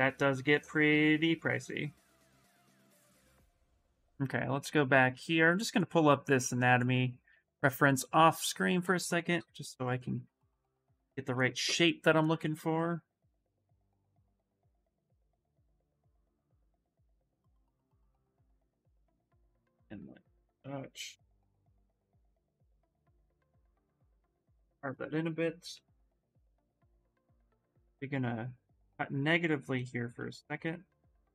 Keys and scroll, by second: 25.2-26.2 typing, 29.5 s.